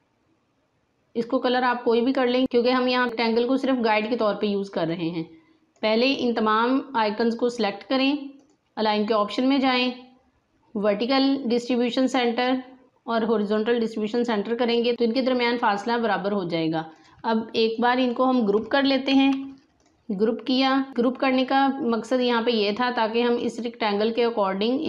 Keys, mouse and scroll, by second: 3.9-8.2 drag, 8.3 click, 11.9 click, 16.9-19.0 drag, 19.0 ctrl+g, 19.7 click.